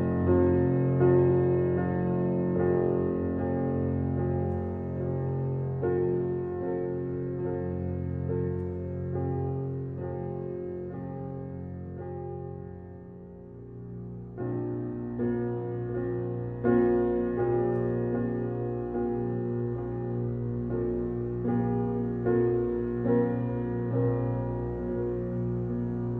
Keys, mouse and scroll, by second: 7.6 click, 12.7-17.0 drag, 21.2 shift+a, 22.4 g, 23.7 g.